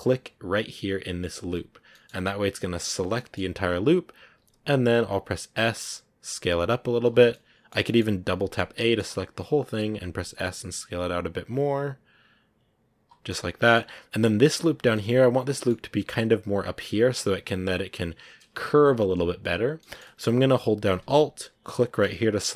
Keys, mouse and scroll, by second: 0.5-1.8 alt+right drag, 1.8-4.3 middle drag, 4.3 s, 7.2-8.3 middle drag, 8.3 a, 8.5 a, 8.7-9.8 middle drag, 9.8 s, 13.2 middle click, 13.6 scroll down 1, 13.8-14.8 scroll up 1, 14.8-21.8 middle drag, 21.8 alt+right click.